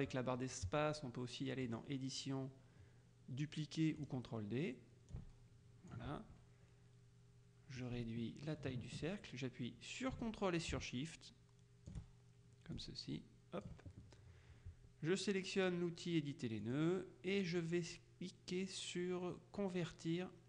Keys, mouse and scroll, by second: 1.7 click, 4.1 click, 5.2 ctrl+click, 7.9-12.5 ctrl+drag, 12.9 ctrl+click, 16.7 click.